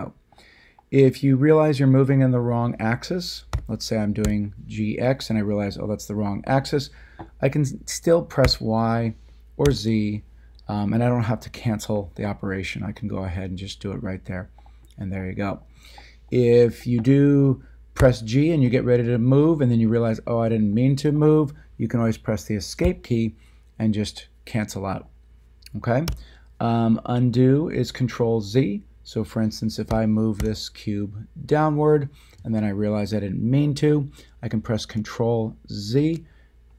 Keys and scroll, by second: 3.5 g, 4.2 x, 8.4 y, 9.6 z, 17.9 g, 22.8 Escape, 26.0 a, 29.9 g, 30.4 z, 35.9 ctrl+z.